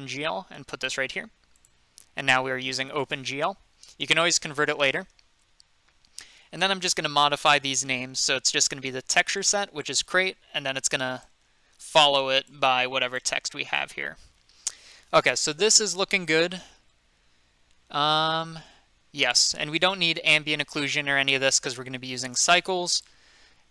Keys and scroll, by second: 7.8 BackSpace, 9.9 BackSpace, 11.3 BackSpace, 12.5 BackSpace.